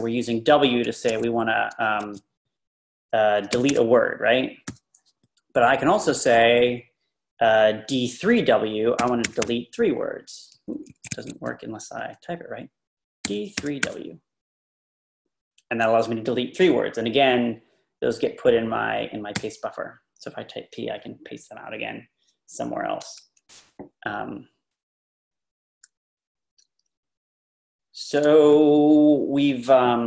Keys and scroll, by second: 0.6 u, 1.1 ⟲, 3.3-4.7 typing, 8.8-9.9 typing, 10.9 Escape, 11.1 Escape, 13.0-14.3 typing, 18.4 Page_Up, 19.4 p.